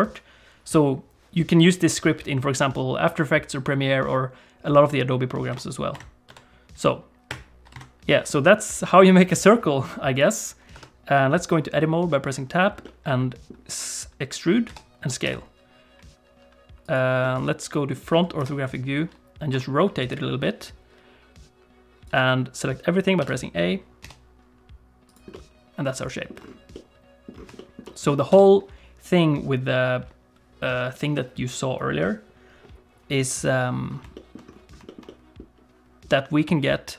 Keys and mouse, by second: 5.5-8.4 drag, 10.1 click, 10.7 Tab, 12.8 middle click, 14.7 e, 17.2 middle click, 18.3 KP_1, 19.5 r, 23.2 a, 24.0 e, 25.3 middle click, 26.2 click, 26.7 click, 27.5 shift+click, 27.8 click, 28.3 Tab, 34.1 shift+click, 34.8 shift+middle click, 35.0 middle click.